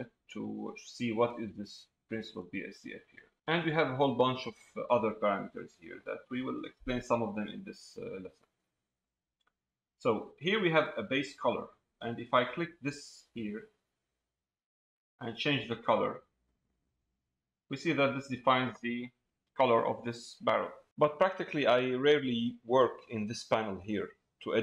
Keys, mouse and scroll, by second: 13.6 click.